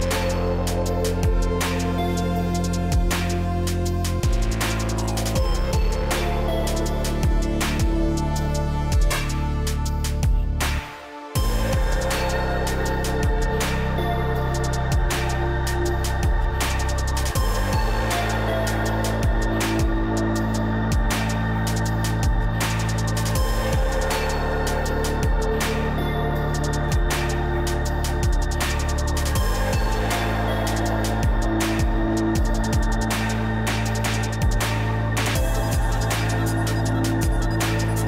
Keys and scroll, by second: 7.8 ctrl+t, 16.9 Down, 18.2 Left, 21.9 Return.